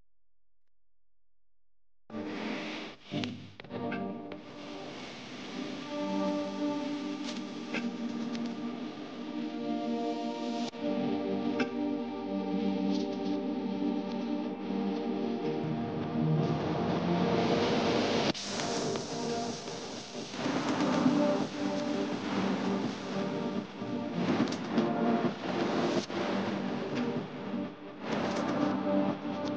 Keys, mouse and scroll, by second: 4.5 ctrl+a, 8.6-10.0 typing, 16.0 ctrl+a, 18.5-19.5 typing.